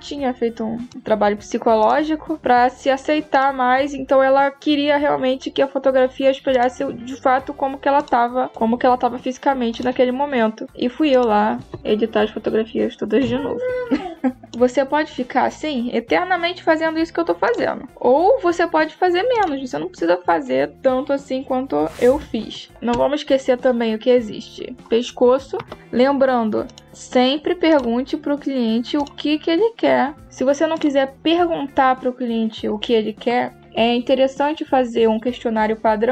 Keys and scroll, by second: 22.7 space.